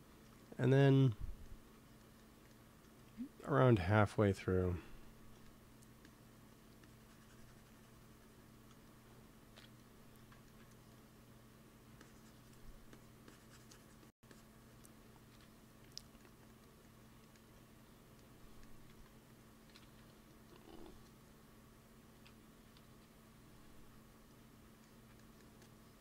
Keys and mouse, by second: 2.9 f, 3.4-5.3 drag, 4.8 f, 5.9-8.7 drag, 8.7 middle click, 9.4 KP_1, 11.9-13.3 drag, 15.2 KP_1, 18.8 ctrl+s, 19.6 KP_1, 19.9 KP_3, 22.8 KP_3.